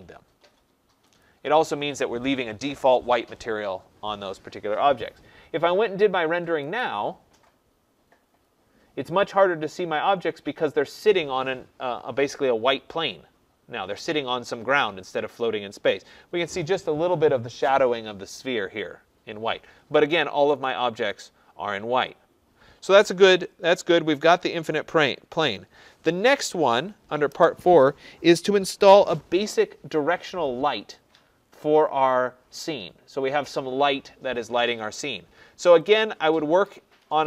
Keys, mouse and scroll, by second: 1.2 click, 6.8 click, 20.6 click, 21.2 click, 35.9 click.